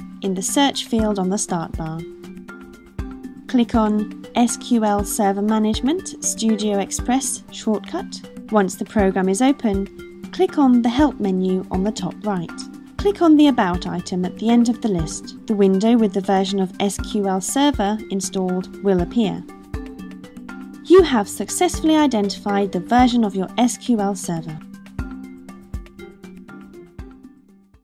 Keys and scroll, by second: 0.0-2.7 typing.